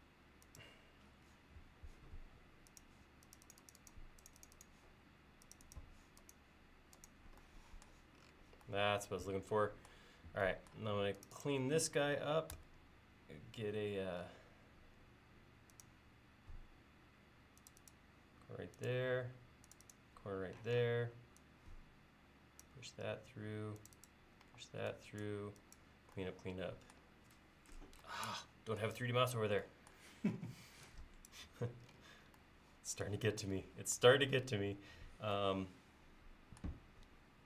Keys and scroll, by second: 12.6 a, 20.7 p, 24.5 e, 34.5 l.